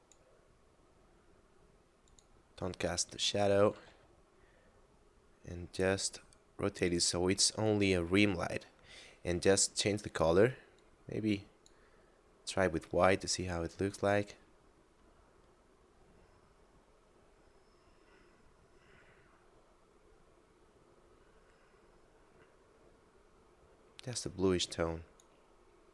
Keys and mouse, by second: 2.0 click, 3.8 r, 3.9 z, 6.9 click, 8.3 middle click, 9.5 click, 13.9 click.